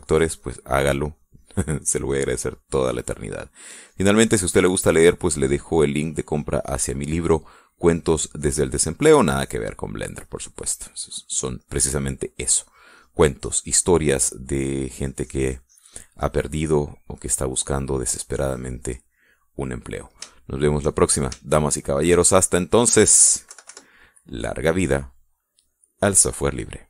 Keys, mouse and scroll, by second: 5.2 click, 5.9 middle click, 6.7 click, 7.7 click, 8.4 middle click, 9.3-10.4 drag, 10.7 click, 11.8 middle click, 13.7-15.5 drag, 15.5 middle click, 16.4-17.6 drag, 17.7 middle click, 18.6-21.5 drag, 21.7 shift+click, 22.4 shift+middle click, 23.5 shift+middle click, 23.8 shift+middle click, 24.9 KP_Subtract, 25.8 middle click.